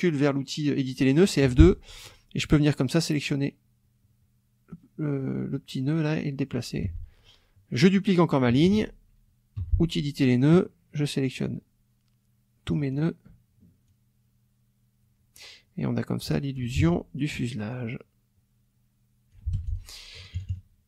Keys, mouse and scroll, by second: 1.4 F2, 3.0-6.1 drag, 6.8 F1, 8.6 ctrl+d, 9.6 F2, 10.1 click, 11.4-13.1 drag, 13.9-16.7 drag, 16.8 F1, 17.7-19.5 drag, 19.5 F1, 19.7 click.